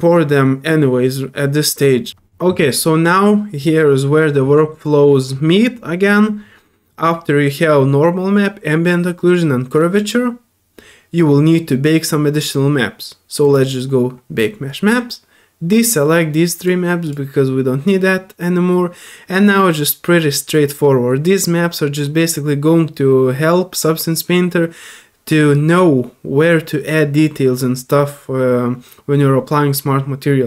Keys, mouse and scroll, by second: 1.0 middle click, 13.4 click, 15.8 click, 16.6 click, 17.0 click.